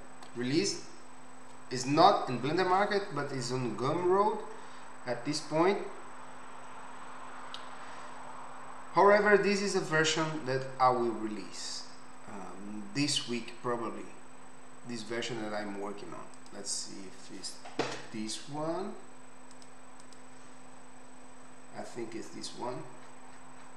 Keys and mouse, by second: 18.0 n, 19.5 click, 20.0 click.